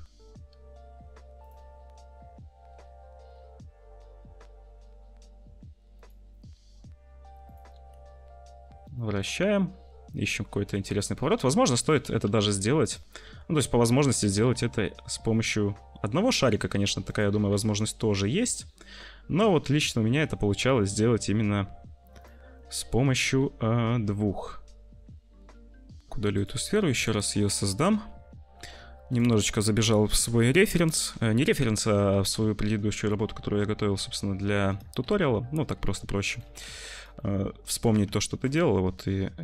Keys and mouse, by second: 1.1 g, 1.5 `, 2.7 g, 6.5 r, 7.8 r, 10.7-14.2 typing, 14.0-16.6 drag, 17.3 r, 20.3 click, 23.3 g, 26.1 ctrl+shift+F1, 26.1 Delete, 26.1 z, 26.2 click, 27.0 middle click, 27.8 `, 28.5 shift+d, 29.5 s, 30.1 `, 31.5 s, 32.0 g, 34.9 `, 35.7 s, 36.3 s, 37.2 middle click, 38.4 s, 38.6 `.